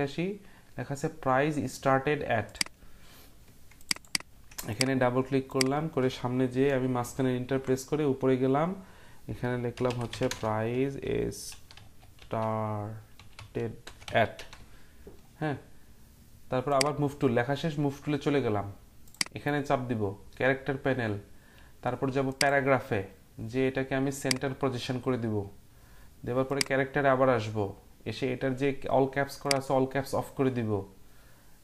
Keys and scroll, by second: 7.0 Return, 9.5-14.4 typing.